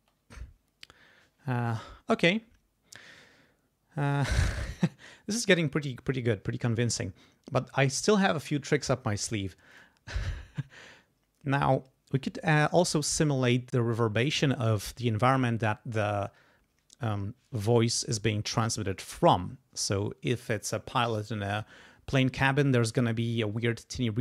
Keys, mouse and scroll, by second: 0.0 space, 9.7 click.